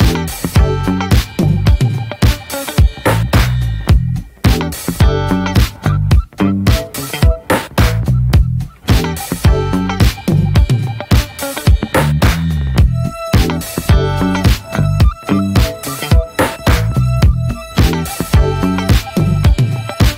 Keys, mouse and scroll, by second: 2.0 shift+s, 4.0 click, 4.5-5.5 middle drag, 5.9 alt+middle click, 6.4 ctrl+s, 6.8 shift+a, 8.5-9.1 shift+middle drag, 9.8 r, 12.4 ctrl+s, 13.0 click, 14.9 alt+middle click, 15.4 scroll down 2, 15.7 drag, 16.2 drag, 16.5 s, 17.4 scroll down 2, 17.6 middle click, 17.7-18.2 scroll up 4, 18.2 middle click, 18.7 ctrl+s.